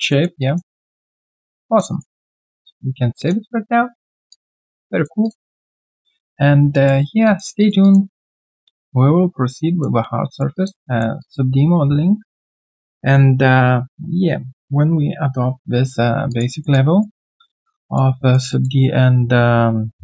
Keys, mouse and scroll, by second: 0.1 alt+middle click, 0.4 alt+click, 0.7 alt+right click, 0.9 alt+middle click, 1.2 alt+click, 1.9 alt+right click, 4.3 alt+click, 5.2 alt+click, 5.5 alt+right click, 5.9 alt+click, 6.7 alt+click, 7.0 alt+right click, 7.2 alt+click, 7.6 alt+right click, 7.8 alt+click, 8.1 alt+middle click, 8.4 alt+right click, 8.6 alt+click, 10.3 alt+right click, 10.5 alt+click, 10.8 alt+middle click, 11.2 alt+click, 16.3 alt+click, 16.6 alt+middle click, 16.9 alt+right click, 17.2 alt+click, 17.5 alt+middle click, 17.8 alt+click, 18.1 alt+middle click, 18.5 alt+click, 19.9 alt+click.